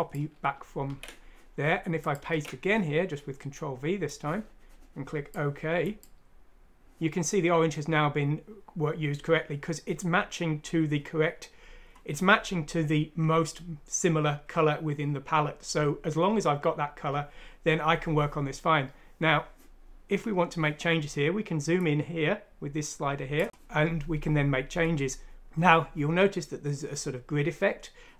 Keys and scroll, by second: 0.8 ctrl+c, 2.3 ctrl+v.